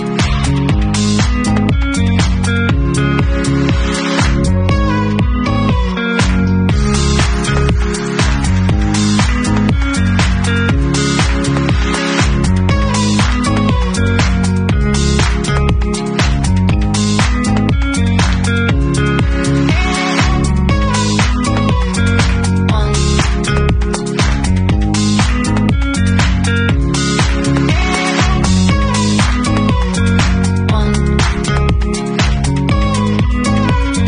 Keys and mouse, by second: 0.3 click, 2.0-4.8 drag, 5.5-34.0 alt+drag, 12.1 alt+middle click.